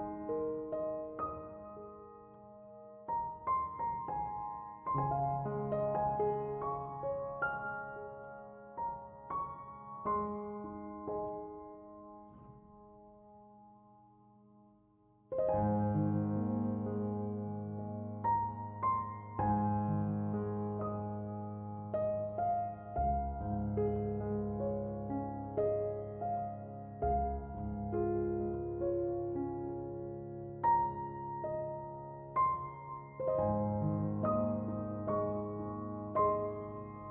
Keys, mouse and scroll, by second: 0.0 Return, 12.3 1, 12.5 5, 12.7 Return, 20.6 1, 20.9 ., 21.1 5, 21.4 Return.